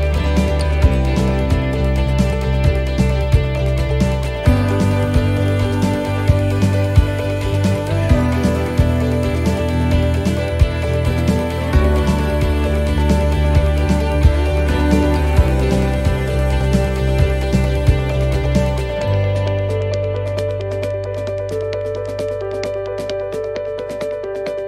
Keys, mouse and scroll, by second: 0.8 click, 2.5 right click, 4.3 click, 8.9 click, 8.9 middle click, 10.3 right click, 11.3 click, 13.1 middle click, 13.8 right click, 14.2 middle click, 15.1 click, 18.1 middle click, 18.5 shift+middle click, 19.5 middle click, 20.2 shift+middle click, 21.0 right click, 22.4 click, 23.9 middle click.